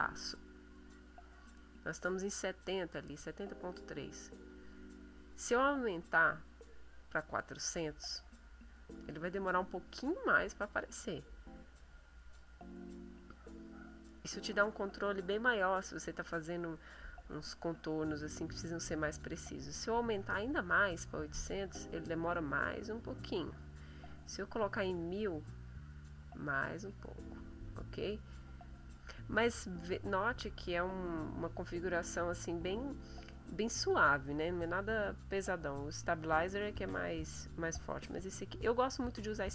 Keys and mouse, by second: 0.7 click, 4.1 click, 6.1-7.3 drag, 8.2-9.3 drag, 9.9 click, 11.6 click, 13.3 click, 17.8-18.9 middle drag, 19.6 click, 21.1-22.2 drag, 22.6-23.7 drag, 24.0 click, 25.3 click, 26.7 click, 28.2 middle click, 30.1 middle click, 31.2 middle click, 35.6 click, 36.7-38.9 drag.